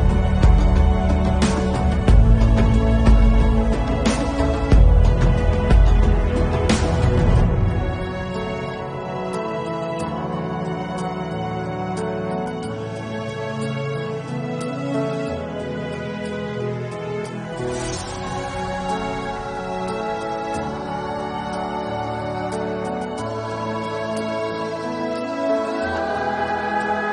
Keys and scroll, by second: 2.8 [, 3.7 ctrl+z, 3.7 4, 3.9 [, 6.4 ], 10.8 ctrl+s, 11.5 ctrl+s, 11.6 ctrl+0, 13.2 0, 13.2 1, 14.5-16.2 typing, 17.9-20.6 typing, 21.3 ctrl+0, 21.5 ctrl+s, 25.4-26.8 typing, 25.7 Return.